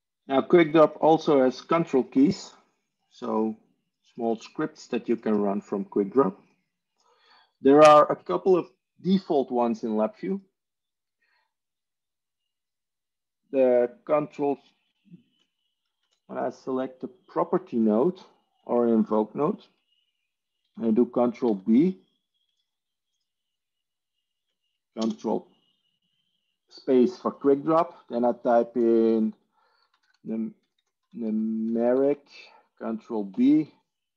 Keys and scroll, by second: 6.1 ctrl+e, 16.3 Tab, 21.3 ctrl+b, 25.0 ctrl+space, 29.6-32.2 typing, 33.2 ctrl+b.